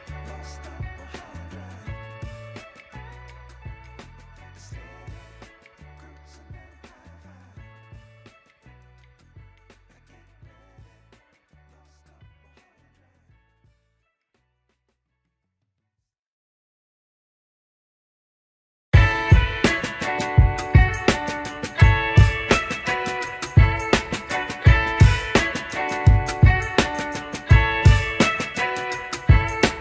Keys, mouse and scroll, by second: 0.4-1.0 scroll down 5, 1.3 shift+middle click, 1.8 click, 2.0 Tab, 2.2-2.8 scroll up 3, 2.9 shift+middle click, 3.9 click, 4.8-6.1 drag, 6.7 g, 9.4 Tab, 10.7 click, 11.3-12.4 middle drag, 12.5-13.0 middle drag, 13.2 scroll down 2, 13.6 shift+middle drag, 14.3 middle click, 14.8 click, 14.9 Tab, 15.4-15.9 scroll up 2, 16.1 middle click, 17.7 alt+click, 18.6 x, 20.6 alt+click, 21.7 x, 23.3 alt+click, 24.4 ctrl+b, 26.3 Tab, 27.1-28.0 middle drag, 28.5 KP_1, 29.1 scroll down 2, 29.6 shift+middle drag.